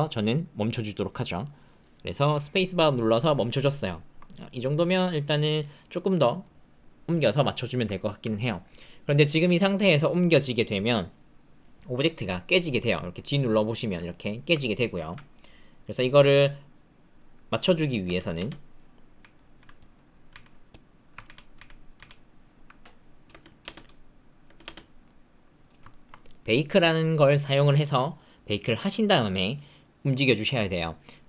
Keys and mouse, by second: 3.8 shift+middle click, 4.2-5.6 drag, 6.2 click, 7.6 shift+click, 7.8 ctrl+click, 12.6 g, 14.6 alt+click, 18.0 space, 18.3 space, 19.1 z, 20.3 z, 21.2 ctrl+z, 21.6 ctrl+z, 21.9 ctrl+z, 23.3 space, 23.6 space, 24.4 space, 24.6 space, 25.0 click, 25.9 shift+click.